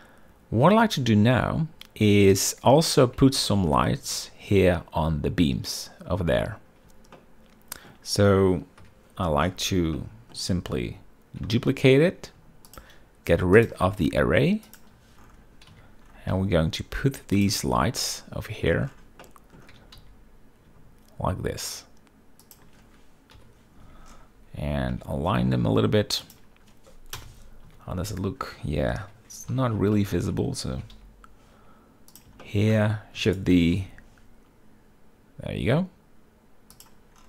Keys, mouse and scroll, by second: 1.6 z, 3.0 click, 4.1 shift+middle drag, 7.9-8.6 shift+middle drag, 9.5 KP_7, 10.7-11.0 shift+middle drag, 12.1 shift+d, 13.4 ctrl+click, 14.3 click, 15.4 click, 16.4 z, 17.0 g, 18.1-18.4 drag, 18.4 z, 18.7-19.4 middle drag, 19.9-20.3 middle drag, 20.4 g, 20.7 z, 23.1 shift+click, 24.1 KP_7, 24.5 z, 25.6 g, 26.9 shift+click, 27.9 KP_0, 28.4 z, 29.8 KP_7, 30.2 z, 30.7 shift+drag, 31.5 g, 31.7 y, 32.8 click, 33.1 shift+middle drag, 33.9 shift+d, 34.3 g, 34.5 y.